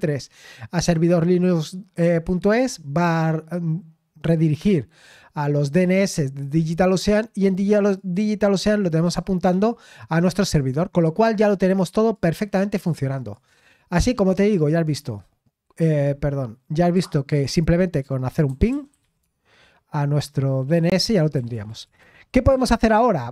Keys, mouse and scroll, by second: 7.9 click, 9.7-12.1 scroll down 2, 12.1-13.6 drag, 14.8 click, 16.8 click, 19.2 typing, 21.3 typing.